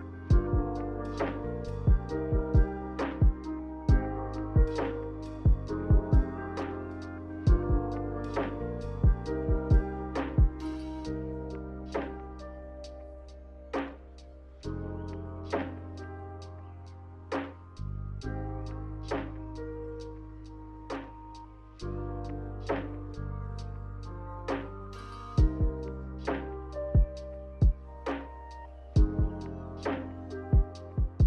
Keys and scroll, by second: 2.9 a, 16.8 Delete.